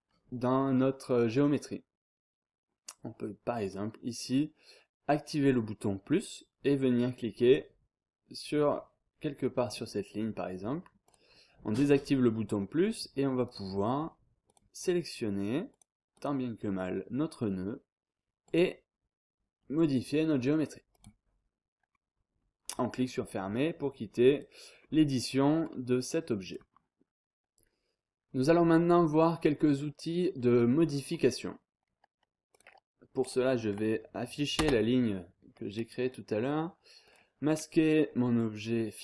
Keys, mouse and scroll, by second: 3.6 click, 7.4 click, 11.0 click, 13.4 click, 14.5 click, 15.7 click, 18.4 click, 20.9 click, 21.9 scroll down 1, 22.1-22.7 scroll up 1, 23.5 click, 24.8 scroll down 1, 24.9-25.6 scroll up 2, 25.6 click, 32.5 click, 34.6 space, 35.5 scroll down 2, 35.7-36.3 scroll up 2, 37.0 click.